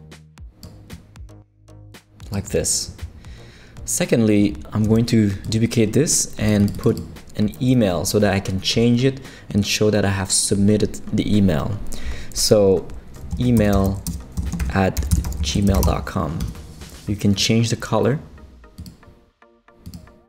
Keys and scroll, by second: 4.8 super+d, 13.1-16.3 typing, 16.4 Escape, 19.6 typing.